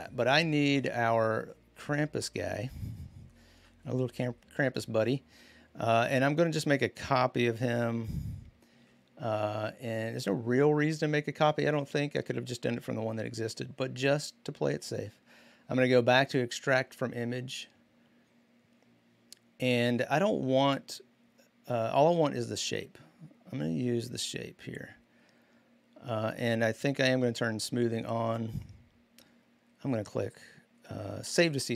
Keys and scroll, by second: 3.3 v.